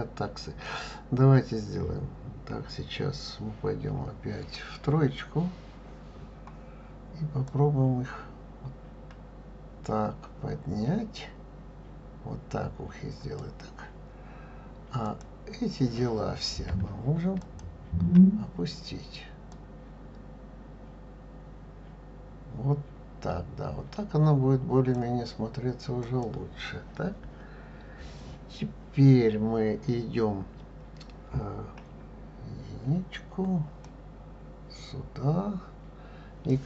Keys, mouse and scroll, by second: 4.0 KP_1, 4.8 KP_3, 6.3-7.5 scroll up 1, 7.5-10.5 drag, 15.1 click, 17.4 shift+click, 19.5-22.5 drag, 26.0 click, 31.8 KP_1, 33.9-36.6 drag.